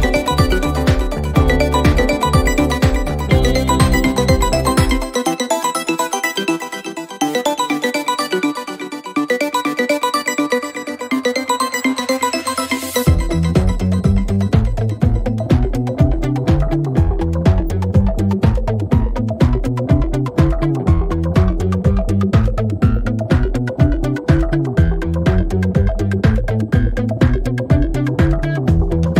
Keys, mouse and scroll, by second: 1.3 click, 2.4-4.0 drag, 4.6-6.2 drag, 8.3 click, 9.2 click, 9.7 8, 10.3 Return, 13.8 click, 15.9 click, 17.3 click, 18.2 click, 18.4-19.3 typing, 19.4 Return, 19.4 click, 22.7-25.5 drag, 26.2 click.